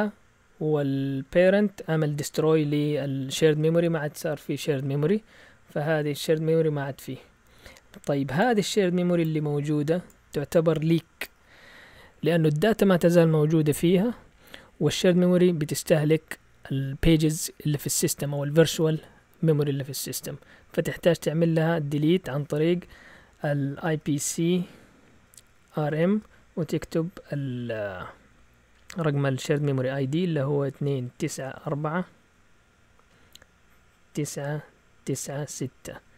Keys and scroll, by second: 3.5 alt+Tab, 23.6-26.4 typing, 30.7-31.2 typing, 33.0 typing, 34.1-35.5 typing.